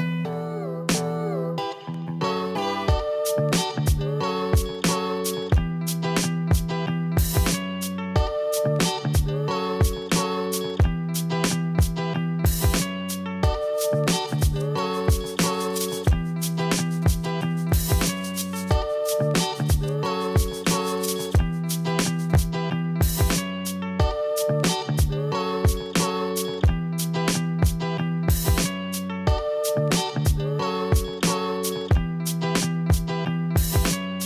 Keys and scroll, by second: 17.3 Delete.